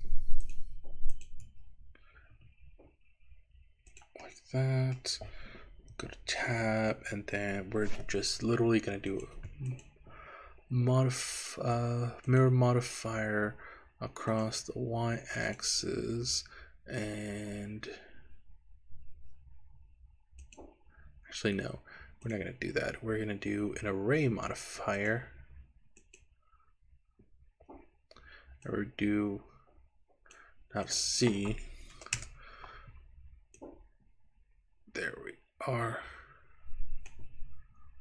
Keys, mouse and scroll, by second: 0.5 click, 1.1 shift+click, 2.4 e, 4.0 click, 4.3 middle click, 6.1 Tab, 9.1 click, 9.7-12.5 drag, 14.3 click, 15.5 click, 20.4 click, 22.3 click, 25.0-26.3 drag, 28.6-30.5 drag, 30.9-32.3 drag, 33.6-37.2 drag.